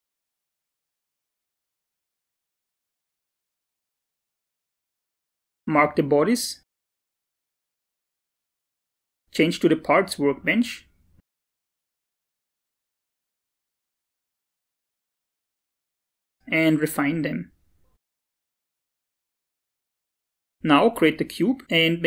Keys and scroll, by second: 7.7 ctrl+a.